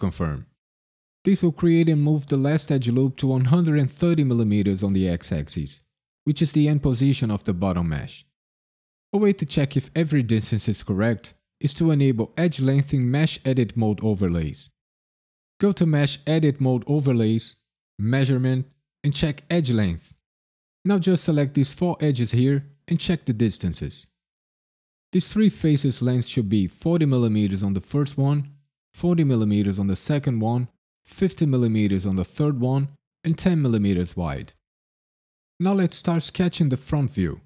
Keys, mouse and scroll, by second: 2.4 a, 2.9 KP_Decimal, 4.3 click, 6.2-7.0 scroll up 2, 15.6 click, 20.9 click, 21.6 ctrl+click, 22.3 shift+click.